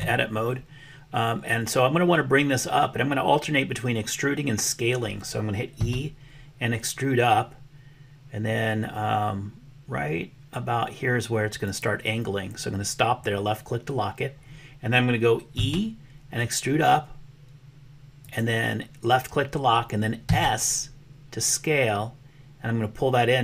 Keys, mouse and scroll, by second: 5.8 e, 15.5 e, 20.4 s.